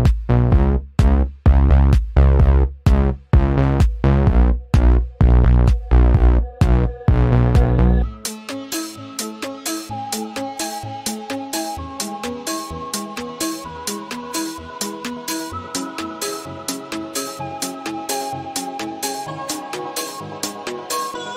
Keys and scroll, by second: 1.1 ctrl+alt+2, 11.1 i, 13.8 v.